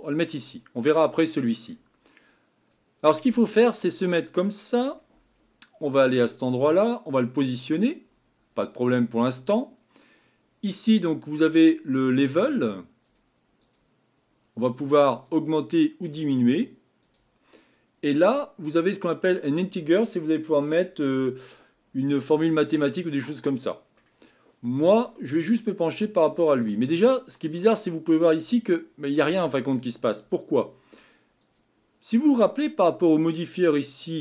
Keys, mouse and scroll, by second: 3.6-6.3 scroll up 7, 7.5 click, 13.1-27.4 drag, 27.4 middle click, 28.3-29.0 scroll up 4, 29.0-30.3 scroll down 2.